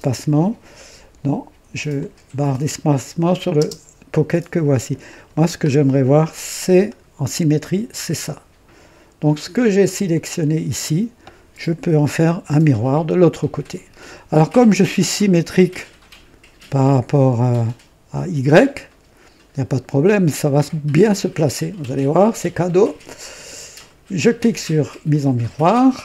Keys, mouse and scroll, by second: 1.9 click, 3.5 space, 3.7 space, 5.0 click, 5.6 scroll up 1, 6.8-7.5 right drag, 7.7 scroll down 1, 10.0 click, 12.1-12.8 right drag, 25.0 click.